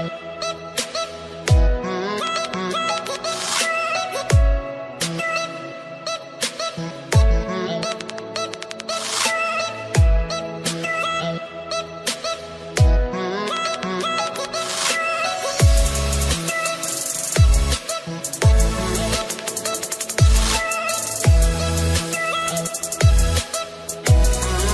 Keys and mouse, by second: 1.6 click, 10.0 click, 11.4 Return, 11.4 click, 12.0 Return, 12.0 click, 12.8-14.8 typing, 13.0 click, 17.3-20.7 typing, 24.1 ctrl+click.